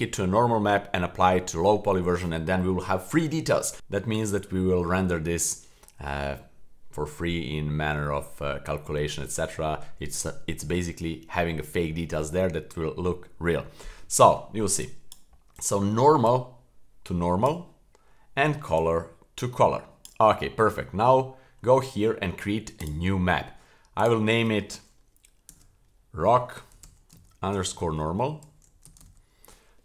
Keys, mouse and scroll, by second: 14.8 click, 16.3-17.5 drag, 18.7-20.1 drag, 20.4 scroll up 1, 20.7 middle click, 21.3-21.8 scroll up 1, 22.8-29.8 drag.